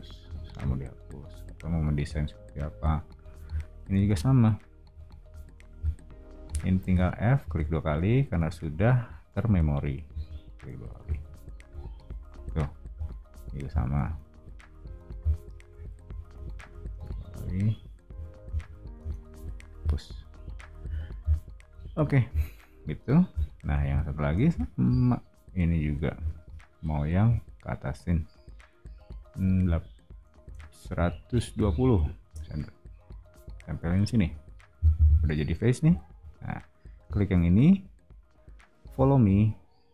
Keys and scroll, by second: 0.2 o, 3.9 space, 6.8 f, 8.3 space, 9.5 p, 10.9 e, 12.3 o, 14.0 space, 16.0 f, 16.9 space, 18.1-20.8 typing, 26.1 l, 29.5-32.1 typing, 32.2 Return, 34.7 space.